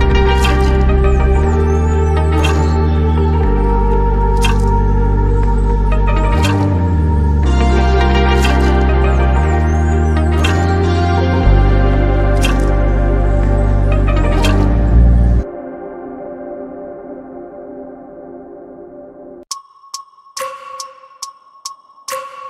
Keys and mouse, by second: 1.6 middle click, 3.4 click, 5.0-7.1 drag, 9.5-12.2 drag, 13.6 click, 14.4 click, 15.0-16.3 drag, 17.6 middle click, 19.0 click, 20.4 middle click.